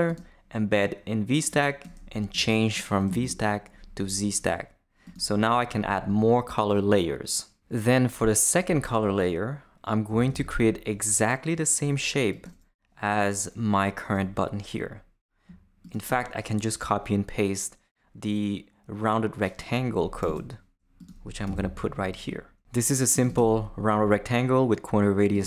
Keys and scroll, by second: 3.1 shift+z, 10.1 Return, 20.2 super+c, 21.5 super+v.